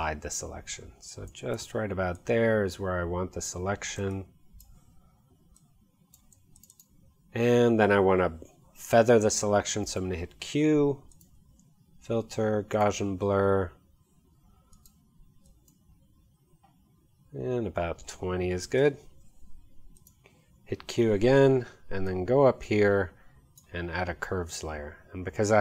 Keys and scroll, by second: 9.9 q, 18.3-19.2 typing, 20.8 q.